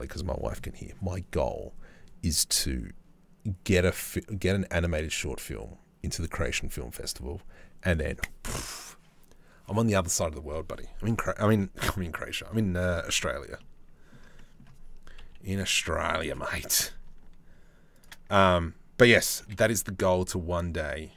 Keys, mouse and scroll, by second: 13.2 middle click, 14.0 middle click, 14.8 KP_3, 16.2 g, 18.0 Tab, 19.0 g.